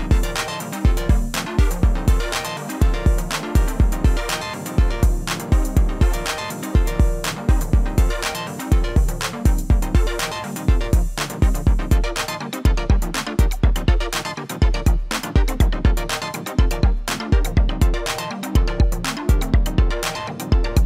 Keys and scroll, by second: 9.6-11.2 typing, 14.8 Return, 15.2 Return.